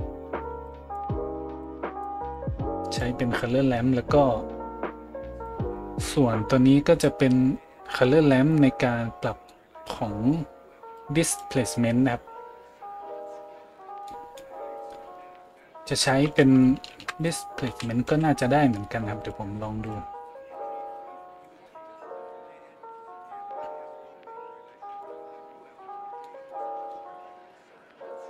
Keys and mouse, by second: 5.4-19.9 drag, 16.9 shift+a, 19.9-20.6 middle drag, 20.6-28.2 drag.